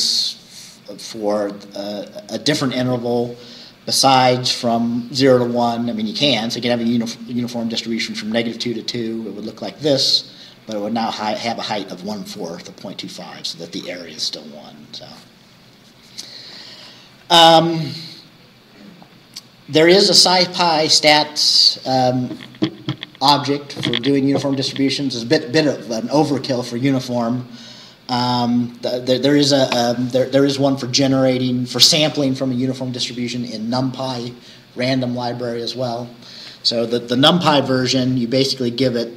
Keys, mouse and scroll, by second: 8.6-9.3 scroll down 4, 12.8-14.5 scroll down 2, 14.5-17.3 scroll down 1, 17.3-17.7 scroll down 1, 28.5-30.4 scroll up 2, 30.4-34.7 scroll up 1, 34.7-38.9 scroll up 1, 38.9-39.1 scroll up 1.